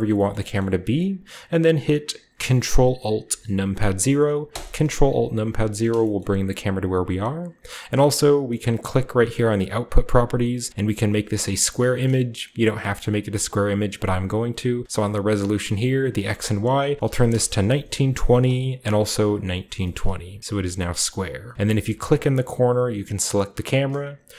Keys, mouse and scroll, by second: 0.0 shift+middle click, 0.3 shift+middle click, 0.6 shift+middle click, 1.3-3.2 middle drag, 4.5 ctrl+alt+KP_0, 6.0-7.9 shift+middle drag, 6.3-7.9 shift+scroll up 1, 8.6-12.7 drag, 13.0-16.1 shift+middle drag, 16.1-17.3 drag, 16.9 typing, 17.3 Return, 18.0 ctrl+click, 18.3 ctrl+c, 18.8 ctrl+middle click, 19.1 ctrl+v, 20.0-21.5 shift+middle drag, 20.0-21.5 shift+scroll down 1, 21.5 shift+scroll down 1, 21.5 a, 22.2-23.2 right drag.